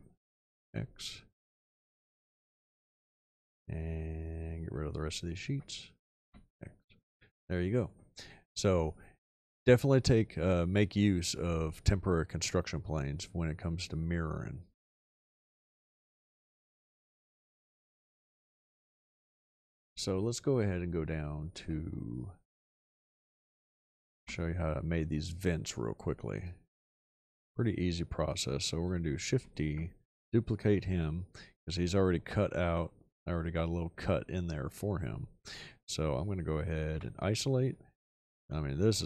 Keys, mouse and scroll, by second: 0.4 x, 6.2 x, 7.1-7.5 middle drag, 7.7 middle drag, 24.1 h, 29.3 shift+d, 34.7 middle click, 36.9 ..